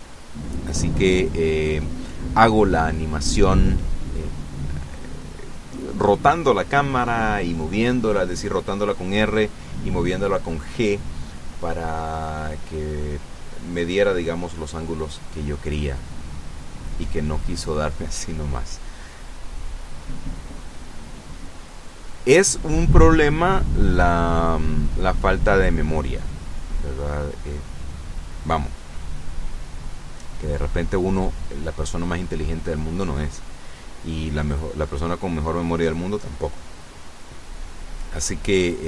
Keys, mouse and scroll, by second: 1.0-2.3 drag, 9.4 g, 10.2 click, 11.0 g, 12.0 click, 12.7 r, 13.8 click, 14.5 g, 15.4 click, 16.0 r, 17.9 click, 18.2 g, 19.5 click, 20.4 r, 21.4 click, 22.4 g, 22.5 middle click, 24.7 click, 25.5 i, 26.9 click, 28.6-34.4 drag, 36.9-38.4 drag.